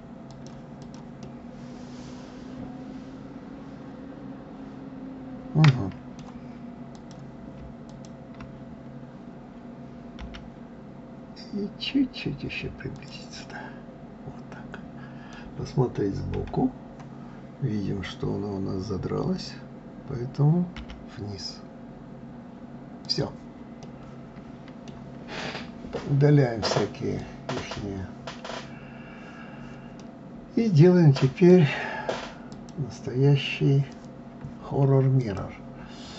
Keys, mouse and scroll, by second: 0.8 click, 1.2-4.3 middle drag, 6.9 click, 7.9 shift+click, 10.2 g, 13.4-16.3 middle drag, 16.3 KP_3, 23.8-25.1 middle drag, 25.1-26.6 scroll down 2, 27.2-28.1 drag, 30.0-32.5 middle drag, 32.5-36.1 drag.